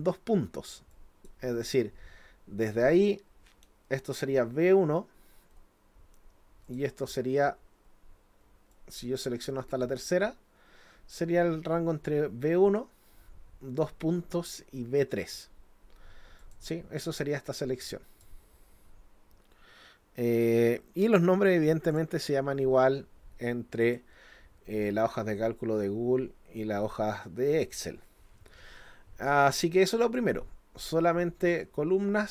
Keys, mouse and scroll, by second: 0.9 click, 6.7 ctrl+click, 8.7-10.0 drag, 16.4 click, 17.6 click, 21.9 click, 23.8 click, 30.0 click.